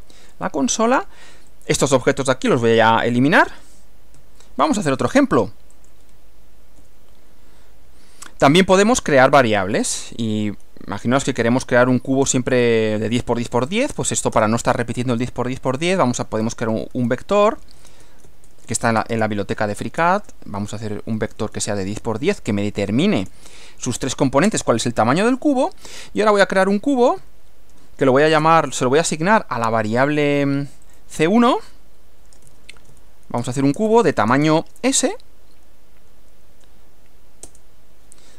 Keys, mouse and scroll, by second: 1.5 click, 3.1 Delete, 3.5 click, 4.2 Delete, 5.8 click, 6.8 Return, 9.9 s, 13.9 space, 14.1 shift+0, 14.4 shift+space, 16.2-23.3 typing, 24.5 Return, 27.2 c, 27.7 1, 28.5 space, 30.1 click, 30.9 click, 32.3-35.0 typing, 37.5 Return.